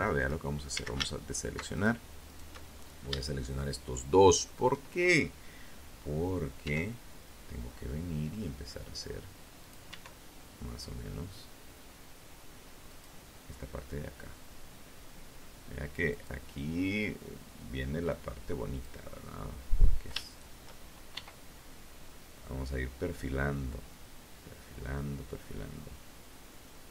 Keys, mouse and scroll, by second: 0.4 alt+shift+right click, 1.0-1.8 shift+scroll up 2, 1.4 shift+click, 4.8 e, 7.8 click, 8.0 e, 11.0 click, 14.2 right click, 15.2-17.2 drag, 18.4 shift+right click, 19.3 e, 25.6 click, 26.3 right click, 26.8-26.9 drag.